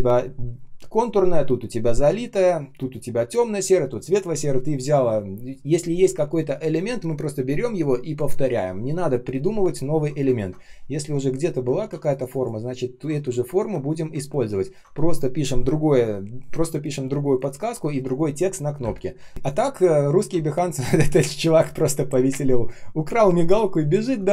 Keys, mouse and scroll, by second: 10.3-10.9 ctrl+scroll down 1, 10.9 Delete, 14.4-15.5 ctrl+scroll up 1, 18.9 ctrl+scroll down 1, 19.1 ctrl+s, 19.3 space, 20.3-20.8 ctrl+scroll up 1, 21.7 ctrl+scroll down 1, 24.0 ctrl+scroll up 1.